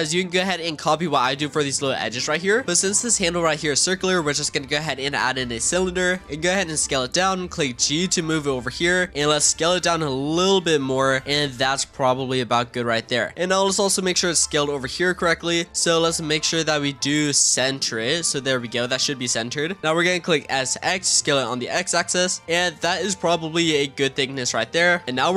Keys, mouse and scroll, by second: 2.4 scroll down 1, 6.2-7.2 scroll up 1, 7.2 g, 9.5 s, 11.0 scroll up 2, 11.2 s, 12.2 g, 13.3 z, 13.8-14.7 middle drag, 14.7-15.1 scroll down 4, 15.1 shift+middle click, 16.0-16.7 drag, 16.7 middle click, 17.6 click, 18.9-20.3 scroll up 2, 20.3 s, 23.2 click, 24.6 click, 24.9 middle drag, 25.0 scroll up 1, 25.1 click.